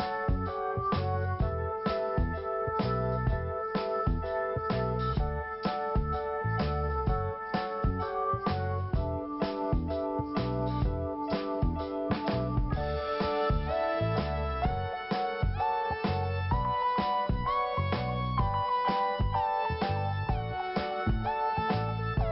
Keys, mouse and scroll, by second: 1.4 click, 3.1 click, 4.0 i, 5.6 click, 6.8 click, 8.3 click, 8.4 click, 9.5 click, 12.2 scroll down 1, 13.3 p, 14.4 click, 16.2 scroll down 1, 17.3 scroll up 1, 19.1 click, 20.0 click, 22.1 click.